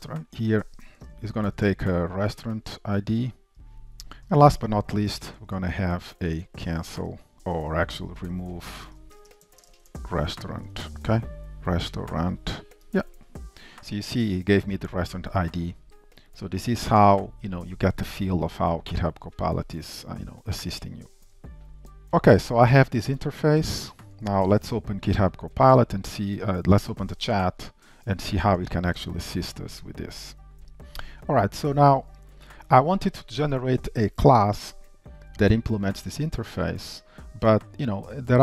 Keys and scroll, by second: 4.3 shift+Return, 12.9 Tab, 23.9 ctrl+alt+o, 25.7 shift+super+a, 29.1 shift+super+F12.